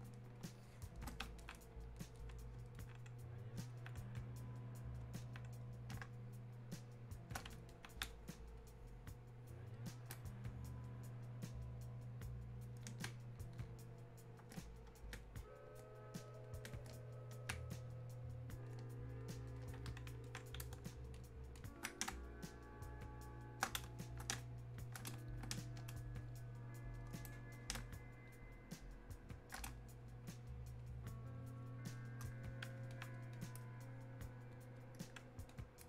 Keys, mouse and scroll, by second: 1.4-5.3 alt+drag, 5.3 alt+click, 6.1 space, 7.7-10.3 alt+drag, 10.3-13.1 ctrl+drag, 13.1 ctrl+space, 20.3 alt+click, 22.1 shift+space, 22.9 shift+click, 23.1 shift+space, 24.8 click, 24.8 space, 27.0 click, 27.8 space, 28.3 click, 28.6 space, 29.8-35.8 drag.